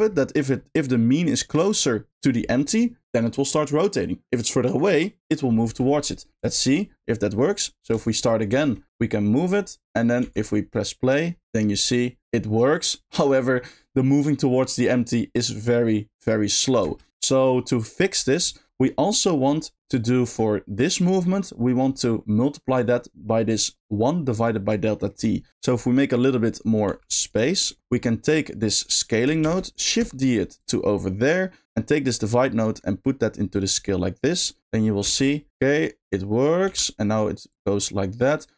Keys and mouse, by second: 6.5 shift+middle click, 7.6 click, 8.0 shift+middle drag, 8.6-16.8 shift+middle drag, 16.8 space, 18.9 middle click, 19.6 middle click, 21.3 middle click, 22.0 middle click, 24.9 middle click, 26.2 click, 27.3 click, 27.6 middle click, 28.2 click, 29.4 shift+d, 29.9 click, 30.4 middle click, 30.5 click, 30.8 middle click, 32.1 click, 32.3-33.6 drag, 34.4 click, 35.1 space, 36.7 g.